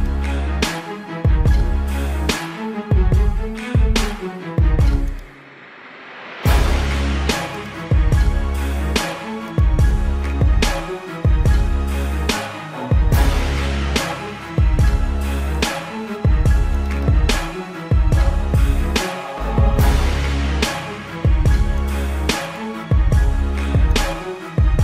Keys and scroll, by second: 0.0 space, 0.8 space, 1.2 space, 2.2 space, 3.5 space, 3.8 space, 5.0 space, 5.6 space, 6.7 space, 8.5 space, 9.0 ctrl+=, 9.7 ctrl+=, 10.0 ctrl+-, 10.4 ], 10.7 space, 11.5 ], 13.5 ], 14.4 ctrl+-, 14.7 space, 14.9 ctrl+-, 15.0 ], 15.4 ctrl+alt+z, 15.6 ], 16.8 ctrl+alt+z, 17.2 ctrl+-, 17.6 ctrl+-, 17.7 ctrl+alt+z, 19.7 space, 20.0 ], 21.7 space, 22.9 space, 24.5 space.